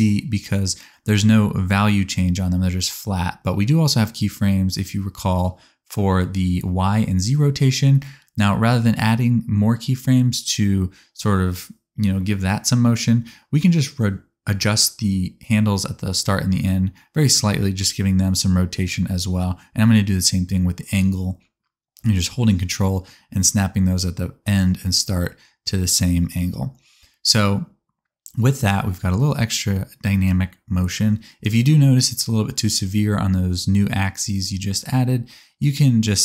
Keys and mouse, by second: 4.8 click, 4.8 middle click, 4.8 right click, 5.0 space, 6.2 middle click, 6.8 middle click, 7.3 middle click, 8.3-8.8 middle drag, 9.3 a, 11.0 middle click, 12.4 r, 12.6-26.1 ctrl+drag, 15.5 middle click, 15.5 right click, 15.9 r, 18.7 space, 22.6 right click, 23.6 right click, 24.2 r, 26.1-32.2 ctrl+middle drag, 30.6 click, 32.2 click, 32.3-32.9 middle drag, 33.8 click, 35.6 click, 35.8 click.